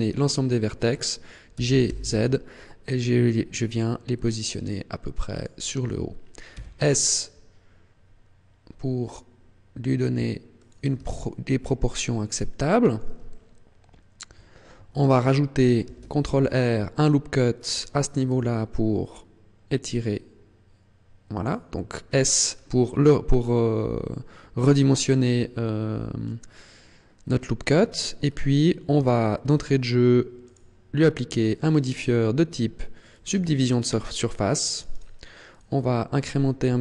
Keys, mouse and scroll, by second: 0.2 shift+middle click, 1.5 g, 5.5 click, 6.5 s, 10.7 click, 11.1 shift+middle click, 13.3 shift+middle click, 15.8 ctrl+r, 17.8 click, 18.3 s, 21.5 click, 22.3 scroll down 6, 22.9-23.3 scroll up 5, 23.3 scroll down 2, 24.7 scroll up 2, 25.3 scroll up 1, 27.7 Tab, 28.2-29.1 scroll down 2, 29.1 shift+middle click, 30.4 click, 31.3 click, 34.7 click, 34.9 click, 35.5 click, 35.7 click.